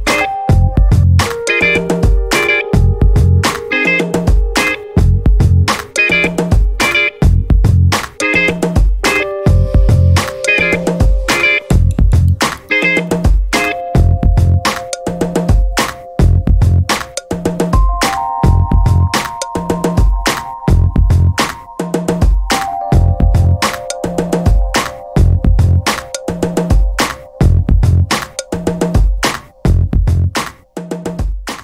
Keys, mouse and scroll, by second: 1.5 click, 2.4 click, 4.4 click, 5.2 ctrl+click, 6.6 click, 7.9 scroll down 2, 8.3 scroll up 2, 8.9-14.3 drag, 14.4 0, 16.1 click, 17.4 click, 18.9 click, 20.1 click, 21.8-23.7 typing, 25.7-26.9 typing, 27.9 click, 30.0 click, 31.2 click.